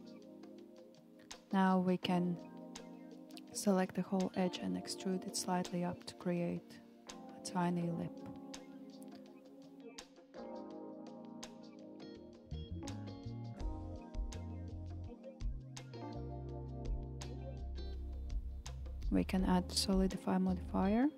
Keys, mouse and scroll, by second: 4.0-5.8 middle drag, 5.8 alt+click, 6.8 alt+click, 8.5 KP_1, 10.6 e, 18.9-21.1 middle drag.